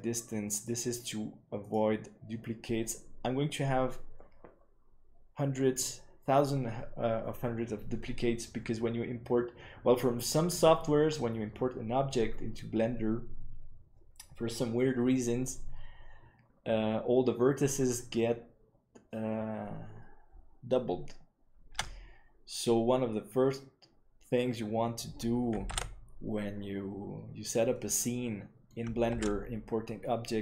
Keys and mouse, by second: 24.0 Tab, 25.7 alt+a, 27.6 middle click, 29.3 ctrl+s.